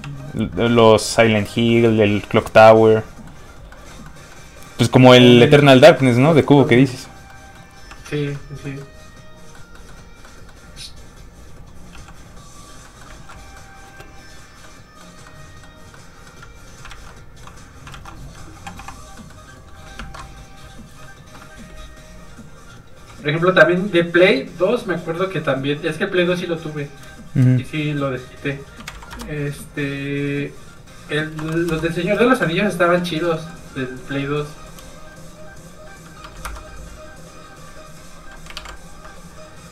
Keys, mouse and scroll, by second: 0.0 shift+f, 0.1 click, 1.7 shift+middle click, 3.7 shift+middle click, 6.1 shift+middle click, 6.6 shift+middle click, 6.9 middle click, 7.0 middle click, 7.9 f, 8.1 click, 8.3 middle click, 11.0 click, 11.9 f, 12.1 click, 12.7 scroll down 1, 12.8 middle click, 13.1 ctrl+z, 13.3 middle click, 13.4 middle click, 13.8 space, 14.6 middle click, 16.5-16.8 scroll up 1, 16.9 alt+shift+z, 17.1 middle click, 17.9 alt+shift+z, 18.7 shift+z, 18.8 n, 19.1 middle click, 19.9 ctrl+Tab, 20.6 shift+Tab, 22.4 click, 28.8 shift+KP_4, 30.4 click, 31.4 KP_0, 31.6 KP_0, 31.7 Return, 32.5 scroll down 1, 33.1 shift+middle click, 33.3 middle click, 34.4 click, 36.2 KP_2, 36.4 Return, 37.5 click, 38.8 KP_2, 38.9 KP_2.